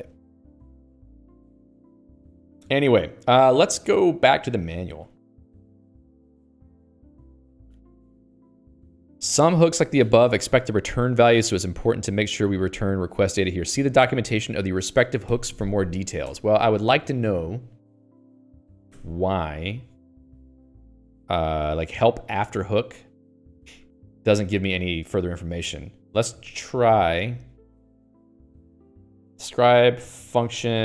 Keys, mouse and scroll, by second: 0.2 ctrl+s, 0.7 Escape.